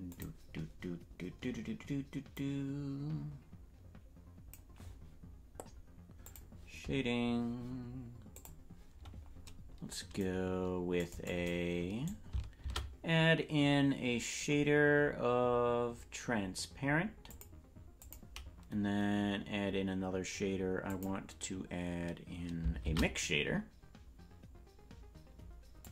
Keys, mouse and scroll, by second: 0.1 click, 2.3-4.6 drag, 6.4 click, 8.4 click, 10.2-12.6 right drag, 12.6 shift+a, 20.9 click, 22.8 shift+a.